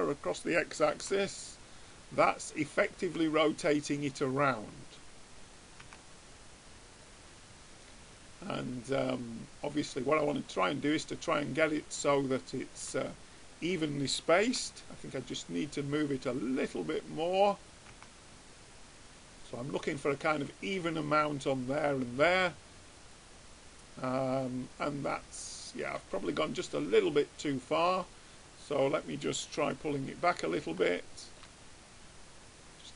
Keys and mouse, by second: 1.4 Tab, 3.2 Tab, 4.6-6.4 drag, 6.4 Tab, 14.7 Tab, 16.4-17.8 drag, 18.4 Tab, 22.2-24.0 drag, 25.6 middle click, 29.8 Tab.